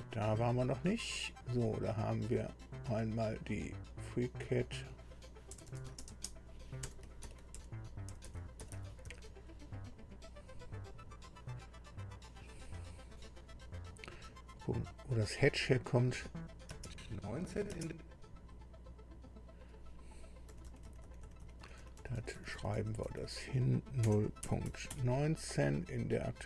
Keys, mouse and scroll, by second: 0.5 click, 4.6 click, 5.7-9.5 typing, 10.9 click, 15.7 click, 16.7 space, 19.2 click, 20.5 Delete, 20.7 Delete, 21.0 Delete, 21.2 Delete, 21.4 Delete, 24.0 o, 24.7 KP_Decimal, 24.9 KP_1, 25.5 KP_9.